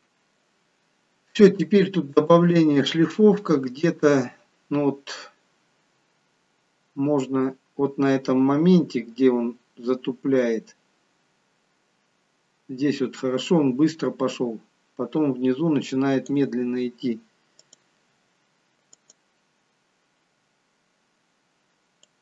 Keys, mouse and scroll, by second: 2.3 click, 17.7 click, 19.0 click.